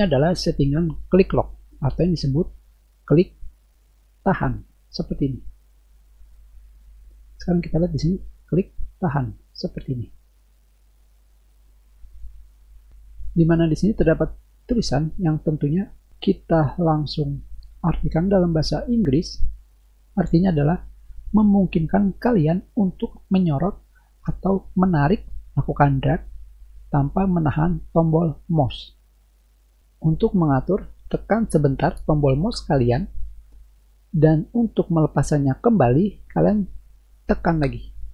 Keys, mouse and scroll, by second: 3.1-6.9 drag, 8.5-10.8 drag, 12.1 click.